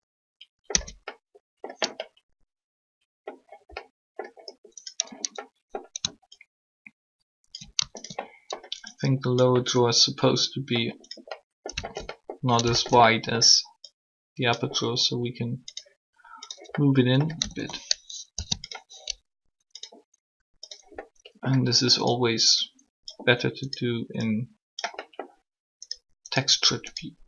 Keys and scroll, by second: 0.7 Tab, 17.4 typing.